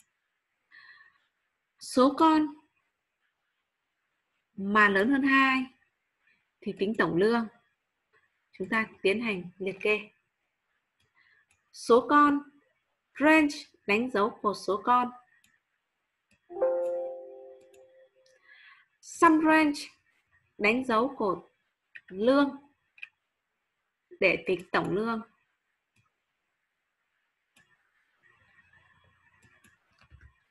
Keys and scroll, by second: 30.4 ctrl+shift+Down.